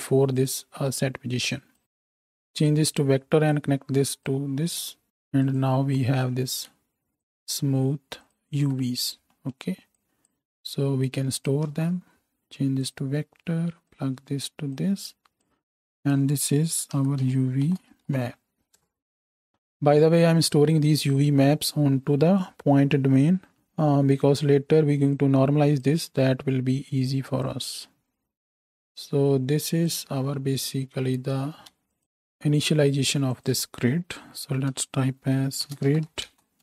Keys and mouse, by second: 0.4-1.5 right drag, 5.6-6.2 ctrl+shift+drag, 6.2 right click, 6.2-7.2 ctrl+drag, 7.2 ctrl+shift+middle click, 7.4-8.3 ctrl+shift+right drag, 8.2 ctrl+shift+click, 8.2 ctrl+shift+middle click, 8.3-10.0 ctrl+shift+right drag, 11.7 shift+d, 28.7 ctrl+j, 32.0 click, 32.4-34.2 right drag, 32.4 x, 33.4 click, 33.4 middle click, 34.2 F2, 34.2-36.6 drag.